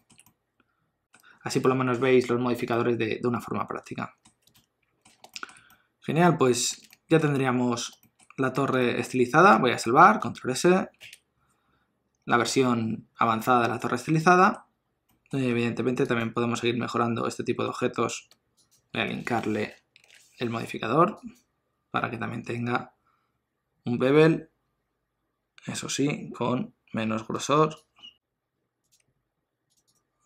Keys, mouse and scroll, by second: 0.3 middle click, 4.5 ctrl+middle click, 5.3 shift+middle click, 5.7 middle click, 6.9 ctrl+middle click, 7.3 middle click, 8.0 shift+middle click, 11.0 ctrl+s, 14.2 middle click, 14.7-15.9 scroll up 3, 15.1 middle click, 16.2 click, 16.7 Tab, 17.7 Tab, 18.6 shift+click, 19.8 ctrl+l, 27.9 shift+click, 29.7 click.